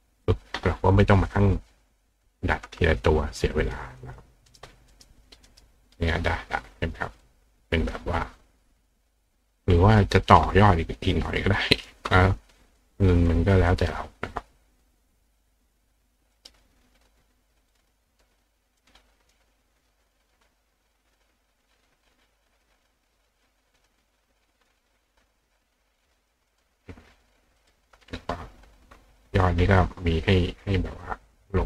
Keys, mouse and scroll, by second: 0.3 click, 1.4 click, 3.6 click, 4.0 click, 4.5 click, 4.9 click, 5.5 click, 7.2 click, 9.8 click, 11.5 click, 12.7 click, 13.2 click, 13.7-14.8 drag, 16.3 right click, 17.7 click, 18.1 click, 18.8 click, 19.3 click, 20.1 click, 22.0 click, 23.5 click, 24.7-26.3 drag, 26.5 click, 27.6 click.